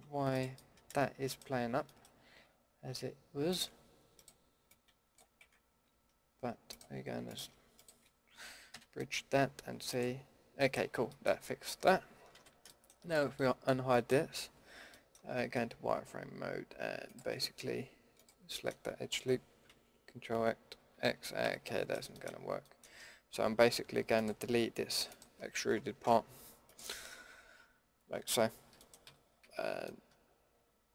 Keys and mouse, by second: 0.8 middle click, 5.4 ctrl+z, 8.7 f, 10.6-11.9 middle drag, 12.3 alt+h, 13.1 a, 13.8 middle click, 14.5 z, 14.9 click, 17.4 z, 19.7 ctrl+x, 20.8 ctrl+z, 21.4 a, 22.5 z, 26.0 Delete, 28.3 z, 29.0 a, 29.4 a.